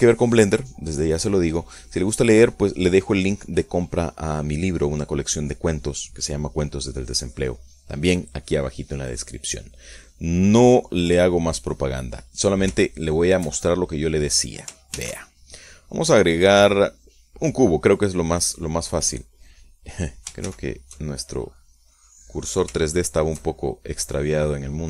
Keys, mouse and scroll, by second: 13.6 click, 14.4 shift+middle click, 15.1 shift+middle click, 16.4 shift+a, 19.0 click, 22.0 shift+c, 23.3 click, 24.3 shift+middle click.